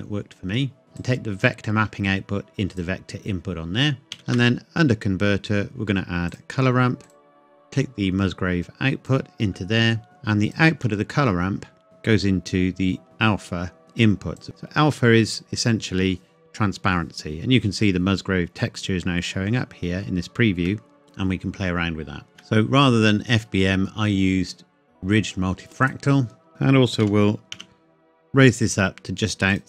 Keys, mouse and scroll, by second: 0.8 scroll up 1, 1.0 click, 1.3 click, 4.0 shift+a, 6.3 click, 10.8 middle click, 11.6 scroll up 1, 13.0 click, 19.2-19.6 scroll up 1, 20.7 middle click, 22.3 scroll up 1, 22.4 shift+middle click, 25.8 click, 26.5 middle click, 27.0 g, 27.6 z, 29.5 click.